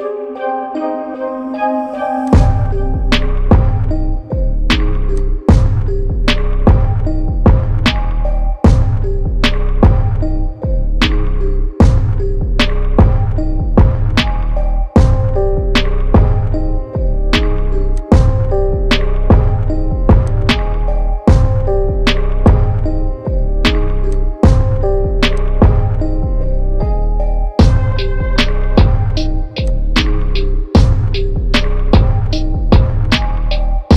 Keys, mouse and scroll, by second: 0.0-0.8 ctrl+alt+scroll down 1, 2.2-7.8 alt+drag, 7.8-15.3 shift+drag, 15.3-16.3 ctrl+alt+scroll up 1, 16.7-17.2 scroll up 1, 17.9-20.2 drag, 26.5 scroll down 1, 27.0 scroll up 1, 28.1 scroll down 1, 29.6 click, 30.2 right click, 30.3 right click.